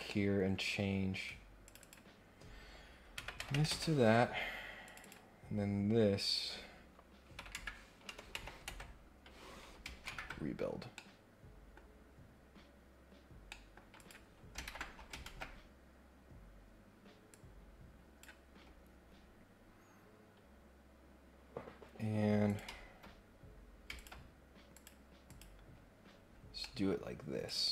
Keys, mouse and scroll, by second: 0.0 middle click, 1.6 click, 4.8 click, 10.9 middle click, 11.9 scroll down 1, 12.3 scroll up 1, 13.4 middle click, 14.0 click, 15.2 ctrl+Tab, 16.6 scroll down 2, 17.3 click, 18.6 scroll down 2, 18.8-19.5 scroll up 4, 22.4 click, 23.9 ctrl+click, 24.7 click, 25.2 click, 25.6-26.6 scroll down 6, 26.6 middle click, 27.4-27.7 drag.